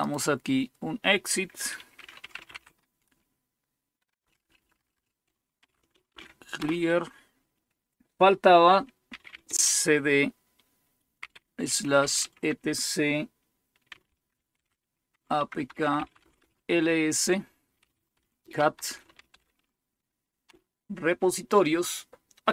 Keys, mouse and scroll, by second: 0.0 click, 1.7-2.9 typing, 4.1-6.6 typing, 8.8-9.8 typing, 11.1-12.4 typing, 13.6-14.5 typing, 15.6-21.0 typing.